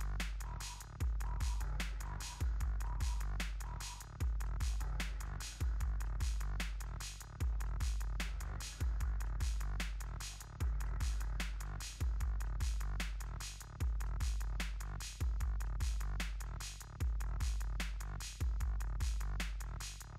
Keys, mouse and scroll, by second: 15.6 click.